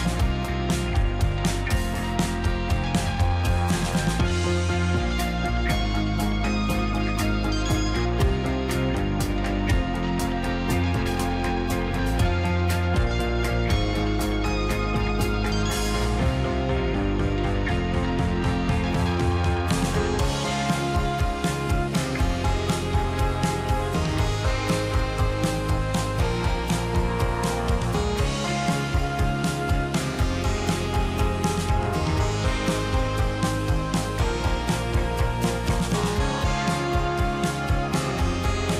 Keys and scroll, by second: 38.6 ctrl+z.